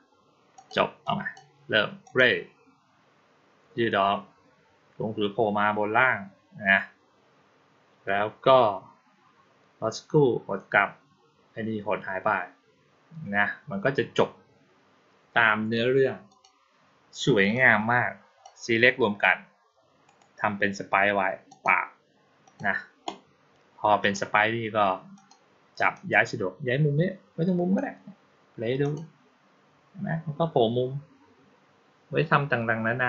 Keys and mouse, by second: 0.4 click, 0.9-1.2 drag, 1.9 click, 16.1 click, 17.4-18.3 drag, 19.9 right click, 21.3 click, 22.3 click, 23.9 click, 25.0 click, 25.8-27.6 drag, 28.7 click.